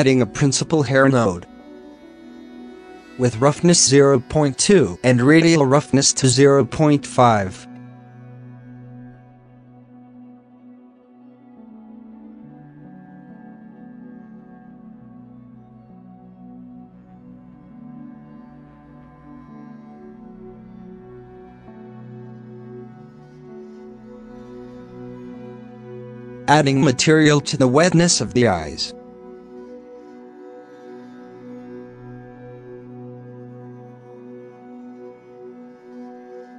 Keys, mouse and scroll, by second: 1.5 scroll up 2, 2.0-4.0 drag, 4.0 middle click, 4.1 scroll up 3, 5.5-7.6 drag, 8.3 h, 8.7 shift+middle drag, 8.8 scroll up 2, 9.6-9.9 scroll up 5, 9.9-10.6 drag, 10.6 h, 12.3 ctrl+s, 13.0 scroll down 1, 13.1 scroll up 1, 16.6 ctrl+s, 16.7 click, 17.4 z, 18.3 click, 18.6 scroll down 2, 19.1 click, 19.8 ctrl+s, 20.0 scroll down 6, 20.6 alt+a, 21.0 alt+h, 21.4 click, 22.0 h, 22.2-23.0 scroll up 1, 23.0 click, 23.3 shift+middle drag, 23.4 scroll up 1, 23.6 g, 25.1-25.5 scroll down 7, 25.5-27.4 drag, 27.4 t, 28.8 scroll up 8, 29.1 alt+a, 29.4 click, 29.7-30.3 scroll up 11, 30.1 middle click, 31.4-34.4 drag, 34.4-35.5 shift+middle drag, 35.5 click.